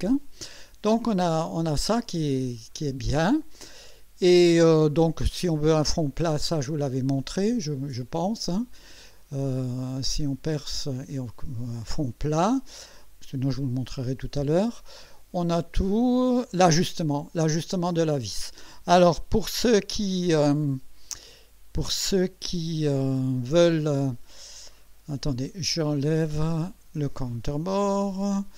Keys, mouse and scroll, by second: 1.4-2.5 scroll down 6, 2.9 scroll down 2, 19.6 KP_1, 26.7 click.